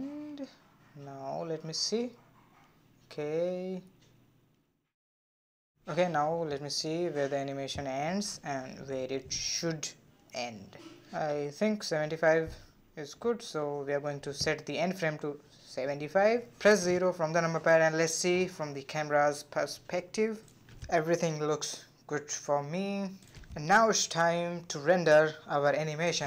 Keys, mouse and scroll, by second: 3.7 space, 6.7 space, 8.1-11.2 drag, 13.2-16.3 drag, 16.3 KP_0, 17.3 space, 19.2 click, 20.6 space, 20.8 click, 21.7-25.7 drag.